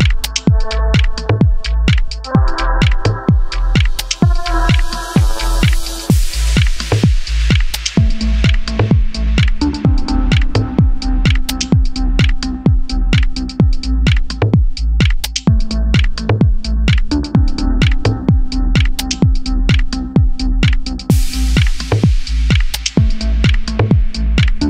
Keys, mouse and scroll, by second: 0.3 s, 1.7 Escape, 2.0 1, 2.8 ctrl+click, 3.3 s, 4.2 click, 5.0 s, 6.5 click, 6.8 3, 7.0 click, 7.8 i, 10.6 click, 10.9-12.5 right drag, 12.3 Tab, 12.5 click, 13.1 h, 13.9 click, 14.1 Tab, 14.3 scroll up 1, 14.8 click, 15.0 scroll up 1, 15.7 shift+middle click, 16.5 shift+click, 17.7 shift+click, 18.5 e, 22.9 click, 23.4-23.9 scroll down 1, 23.9-24.6 middle drag.